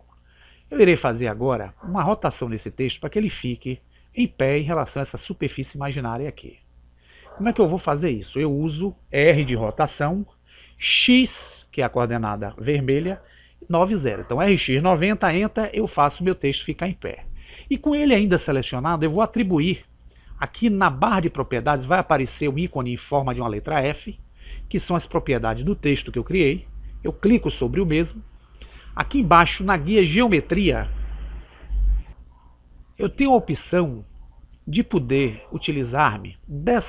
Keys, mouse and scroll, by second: 9.7 r, 27.1 click.